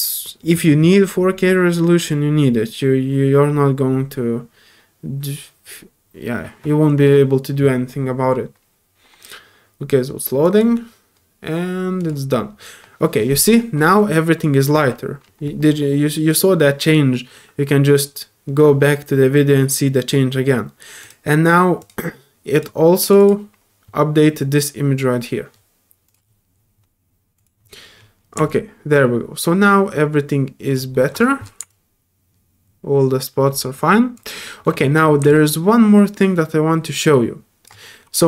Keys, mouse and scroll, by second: 10.4 click, 10.4 typing, 12.0 click, 14.2 scroll up 1, 21.0 click, 21.8 click, 22.5 click, 23.0 click, 23.2 click, 26.1 click, 27.3 click, 28.5-30.7 alt+drag, 30.9 alt+middle click, 31.7-34.1 alt+drag, 34.4 middle click, 35.2 scroll up 2, 35.3-37.6 drag, 37.8 middle click.